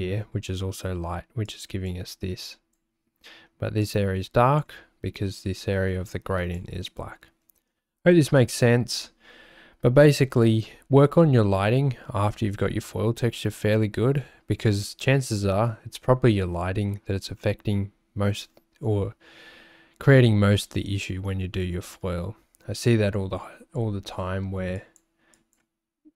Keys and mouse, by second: 1.4 click, 2.4 click, 3.8 click, 5.4-6.6 drag, 8.3 ctrl+alt+shift+2.